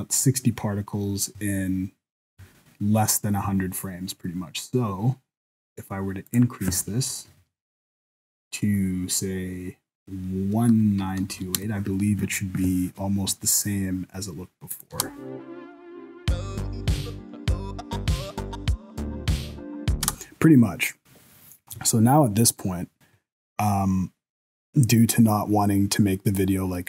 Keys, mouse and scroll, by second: 4.7-6.3 scroll down 6, 6.3 click, 6.3-8.2 scroll down 1, 14.7 click, 14.9 space, 20.0 space.